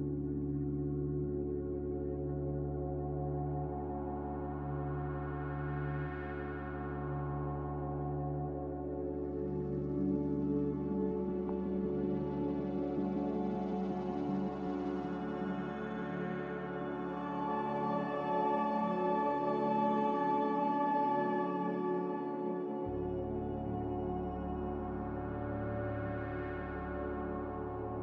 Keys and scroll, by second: 2.4 n, 23.0 0, 23.2 Return.